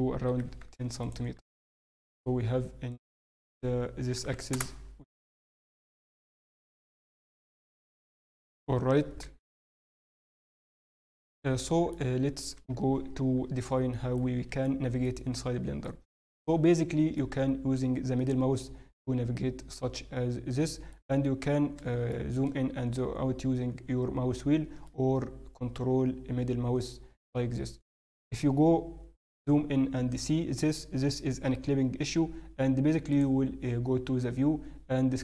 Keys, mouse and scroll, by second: 1.2-1.8 scroll down 4, 1.5 Tab, 1.8 middle click, 2.9 click, 6.8 Tab, 6.8 n, 7.1 middle click, 8.1 a, 9.8 a, 10.4 alt+a, 11.5 middle click, 12.0 Tab, 13.9 shift+middle click, 16.1-16.9 scroll down 1, 17.1 middle click, 17.1-18.0 scroll down 3, 22.1 shift+middle click, 22.5-22.8 scroll up 1, 22.8-23.8 scroll down 9, 23.3-23.8 scroll up 4, 24.0-24.5 scroll down 1, 24.8 ctrl+middle click, 24.8-25.4 scroll up 8, 32.1 n, 33.1 click.